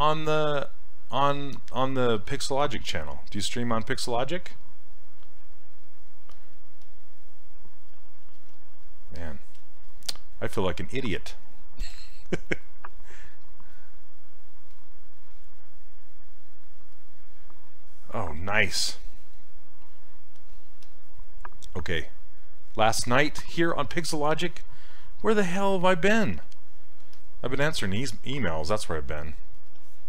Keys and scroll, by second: 8.5 s, 11.0 s.